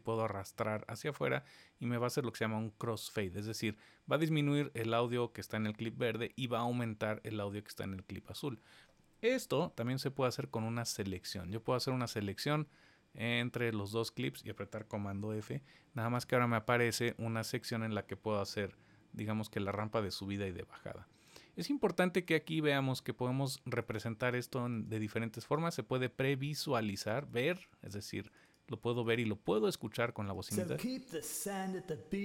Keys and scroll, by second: 9.4 super+z, 15.0 super+f.